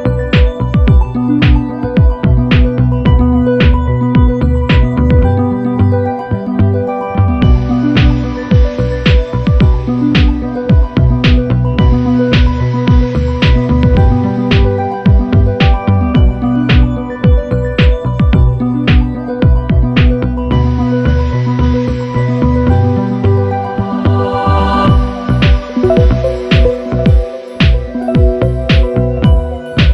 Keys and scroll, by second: 0.7 space, 23.8 F9, 25.8 F9, 26.9 ctrl+v.